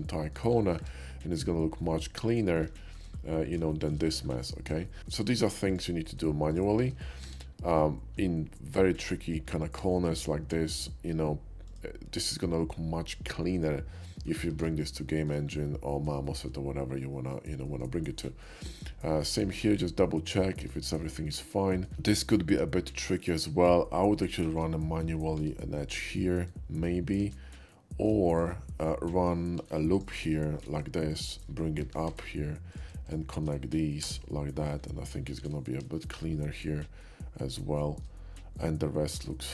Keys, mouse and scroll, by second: 0.0 middle click, 0.2 middle click, 0.7 middle click, 0.9 Tab, 1.8 middle click, 2.4 middle click, 2.8 shift+middle drag, 3.2-3.9 shift+middle drag, 4.1-4.7 shift+middle drag, 4.9 shift+middle click, 5.7 ctrl+click, 6.5 shift+click, 7.2 q, 11.7 click, 13.3-14.3 middle drag, 14.6 alt+x, 15.1 shift+middle click, 15.7 middle click, 16.3 middle click, 17.3 shift+middle click, 18.3 shift+middle click, 19.1 shift+middle click, 19.6-20.7 shift+middle drag, 21.3 shift+middle click, 21.7 shift+middle click, 23.2 shift+click, 24.3 shift+click, 25.4 j, 26.5 middle click, 27.7 ctrl+z, 27.7 middle click, 28.3 shift+middle click, 29.6 ctrl+r, 29.9 click, 30.7 right click, 31.1 shift+click, 32.7 alt+a, 32.7 click, 33.1 shift+click, 34.0 j, 34.6 middle click, 35.4 alt+x, 36.0-37.4 shift+middle drag, 37.8 shift+middle click, 38.6 shift+middle click, 39.4 shift+middle click.